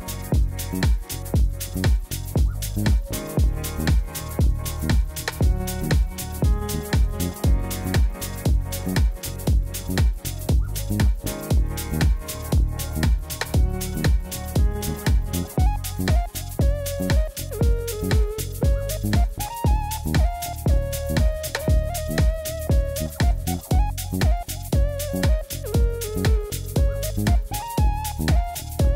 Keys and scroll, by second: 4.2 ctrl+r, 7.1 ctrl+r, 9.6 ctrl+r, 12.3 Tab, 18.9 g, 19.2 z, 22.6 shift+d, 23.1 z, 25.7 Tab, 26.4 a, 26.7 s, 27.9 Tab.